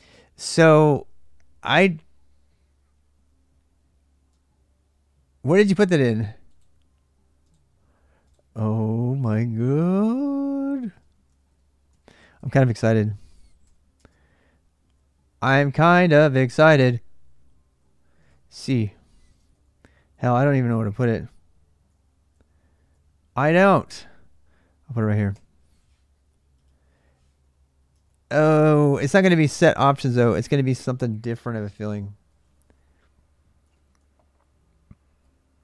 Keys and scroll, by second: 10.6-13.4 typing, 13.7 Return, 14.7-15.5 j, 17.6-25.1 typing, 19.2 ctrl+[, 27.7 ctrl+[, 27.9-28.2 h, 30.3-35.6 typing.